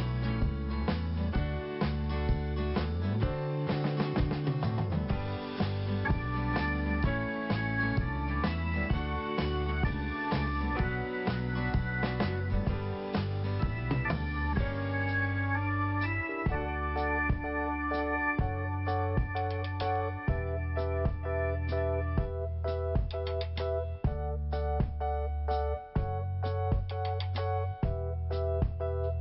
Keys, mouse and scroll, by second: 1.8 click, 4.9 click, 4.9 click, 6.0 click, 6.0 click, 6.1 click, 6.3 click, 8.6 click, 9.8 click, 11.5 click, 11.8 double click, 13.2 click, 13.3 click, 13.4 double click, 15.6 click, 15.7 click, 16.4 scroll down 1, 17.4 click, 20.9 click, 21.0 click, 22.0 click, 22.0 click, 22.8 click, 24.4 click, 24.4 click, 24.9 click, 26.5 click, 28.5 click, 28.6 click.